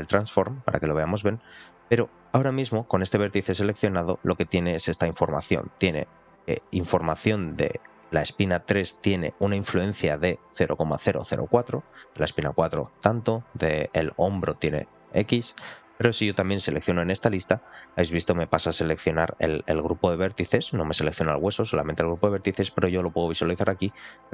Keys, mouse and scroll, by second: 2.3 scroll up 2, 4.2 scroll up 1, 4.4 shift+middle click, 6.7-7.8 drag, 15.7-16.2 scroll down 2, 17.0 click, 17.0 scroll down 1, 17.6 scroll down 2, 18.0 shift+middle click, 21.1 click, 22.3 click, 23.2 click.